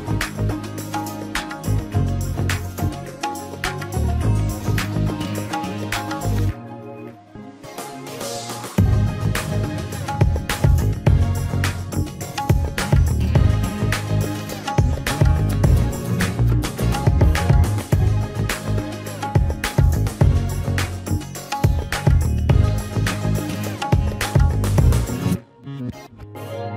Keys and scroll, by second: 3.5 BackSpace, 3.7 KP_3, 11.7 BackSpace, 12.0 KP_Subtract, 12.6 KP_6.